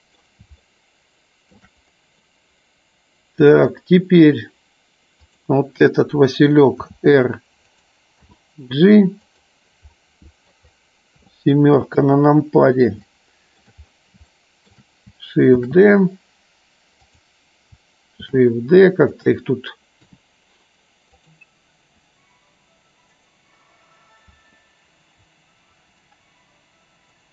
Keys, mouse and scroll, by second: 0.6-1.5 shift+middle drag, 1.5 scroll down 1, 3.5 click, 5.1 click, 7.5 click, 8.1 g, 9.9 middle click, 11.6 KP_7, 13.0 shift+middle click, 14.3 shift+middle click, 15.5 shift+d, 16.9 click, 18.3 shift+d, 19.0 click, 20.0 r, 21.9 g, 23.0 click, 25.6 shift+d.